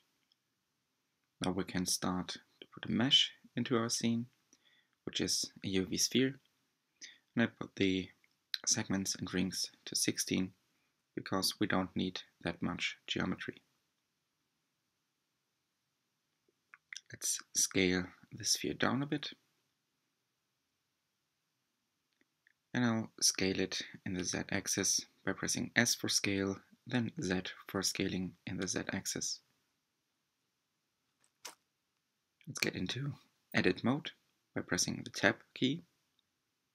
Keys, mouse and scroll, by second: 3.5-3.9 drag, 6.7 click, 8.2-11.3 middle drag, 11.4 click, 14.2 alt+z, 15.8 s, 19.2 click, 20.2 g, 23.3 s, 24.4 click, 26.1 s, 29.4 s, 33.2 alt+z, 34.4 Tab, 34.9-36.7 middle drag.